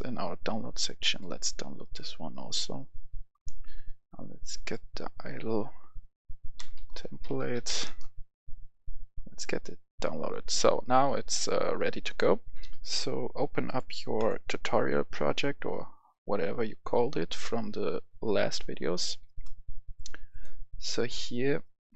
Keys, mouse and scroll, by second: 6.4-7.6 typing, 7.7 Return, 10.1-15.2 drag, 16.8-18.7 right drag, 17.4 s, 17.8 s, 18.3 s, 18.7-19.8 right drag, 19.8 click.